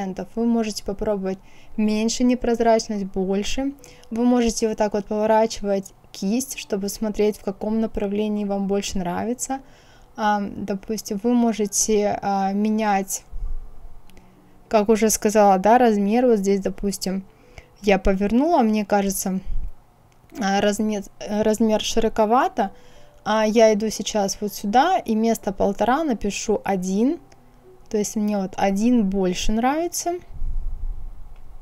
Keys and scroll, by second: 25.0 KP_1, 25.3 Return, 30.7 KP_1, 31.2 Return.